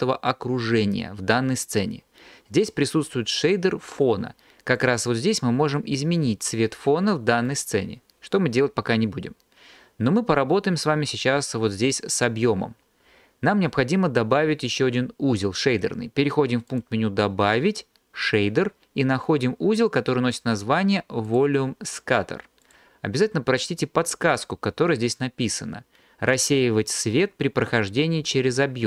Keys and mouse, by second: 16.7-21.5 drag.